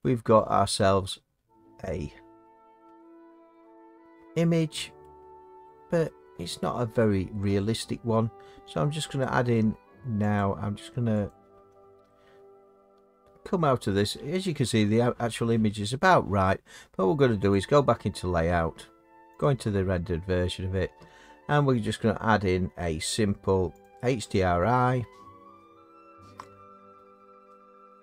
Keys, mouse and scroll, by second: 0.3 middle click, 0.3 middle click, 0.6 middle click, 5.0 middle click, 5.6 middle click, 5.7 middle click, 7.0 scroll, 7.0-10.4 middle drag, 10.4-14.0 drag, 14.0-17.5 middle drag, 17.5 click, 19.4 click, 23.9 click.